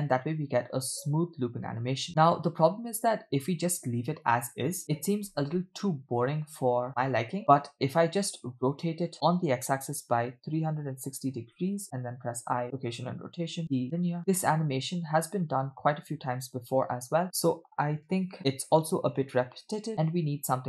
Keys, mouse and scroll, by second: 7.6 space, 8.8 click, 9.2 r, 12.1 i, 13.6 t, 14.2 space.